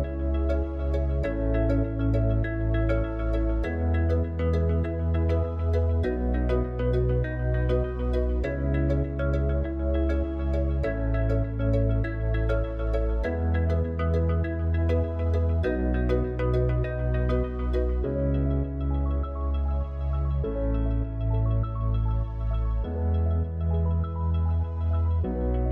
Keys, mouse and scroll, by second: 6.0-8.3 drag, 15.1-16.9 drag.